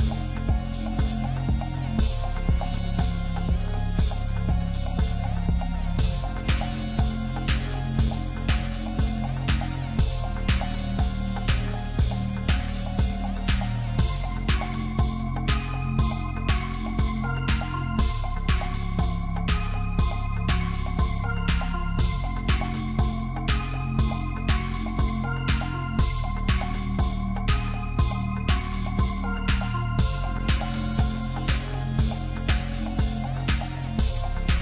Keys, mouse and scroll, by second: 0.2-1.0 scroll up 1, 1.0 scroll up 1, 1.3 ctrl+r, 2.6 Tab, 2.9 scroll down 2, 3.1 middle click, 3.8 scroll down 1, 4.0 shift+middle click, 4.4 scroll up 2, 4.6 Tab, 4.9 middle click, 5.8 KP_1, 6.9 click, 7.2 shift+middle click, 8.0-9.0 scroll up 2, 9.0-9.9 scroll up 1, 10.0 click, 10.7 alt+shift+click, 11.6-11.9 scroll down 1, 11.9 click, 12.6 alt+shift+click, 13.2 scroll up 2, 13.5 middle click, 14.3 e, 20.3 e, 21.8 Tab, 22.1 scroll down 1, 22.3 middle click, 22.7 scroll up 3, 22.9 Tab, 23.9 ctrl+r, 25.6 Tab, 25.9-26.3 scroll down 3, 26.3 middle click, 26.8 right click, 27.5-27.8 scroll down 1, 27.8-29.7 middle drag, 29.7 KP_1, 30.4-30.7 shift+middle drag, 30.7-31.7 scroll up 1, 31.7-32.2 scroll up 1, 32.2-34.6 drag.